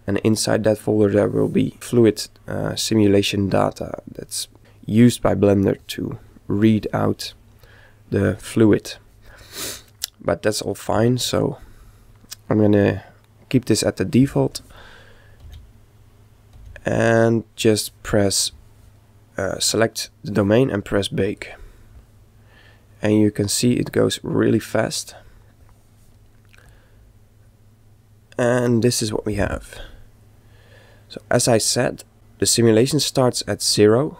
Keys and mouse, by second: 15.2-16.9 right drag, 15.5 g, 16.6 g, 19.4-21.2 right drag, 21.3 click, 26.7 click.